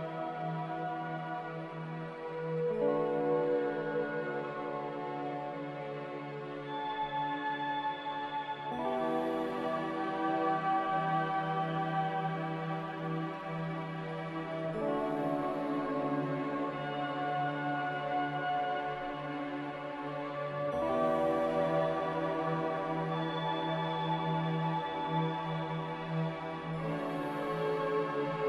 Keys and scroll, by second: 11.2 ctrl+z, 18.6 3, 18.7 0, 19.2 Return, 25.5 3, 25.5 0, 25.9 Return.